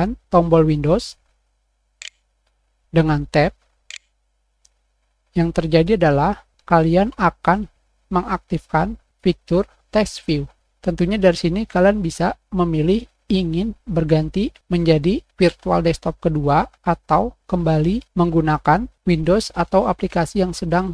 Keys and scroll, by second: 0.0-0.8 typing, 3.0 super+\, 3.2 super+Caps_Lock, 3.3 super+Tab, 16.0 super+Escape.